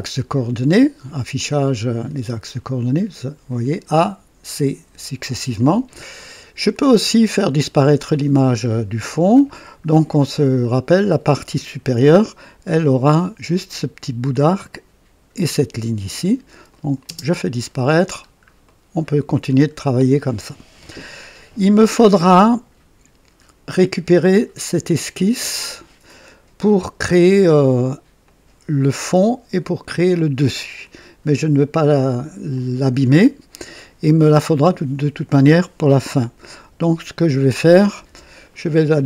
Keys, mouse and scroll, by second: 1.3 click, 4.7 Escape, 4.8 Escape, 6.0-6.3 scroll up 1, 6.5 scroll down 1, 9.4 scroll up 1, 10.1 right click, 16.6 click, 17.0 space, 18.1 scroll down 2, 18.6-19.3 right drag, 19.3-19.6 scroll down 2, 28.1 click, 32.4 click, 36.6 KP_1, 38.0 KP_3.